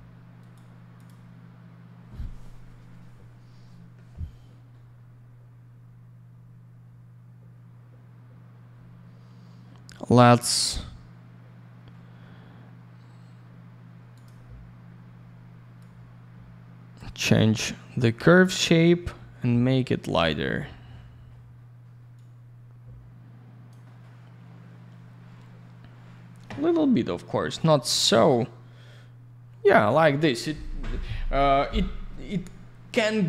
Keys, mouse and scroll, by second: 0.4 right click, 0.5 right click, 0.9 click, 1.0 click, 14.1 click, 14.2 click, 15.7 click, 22.1 click.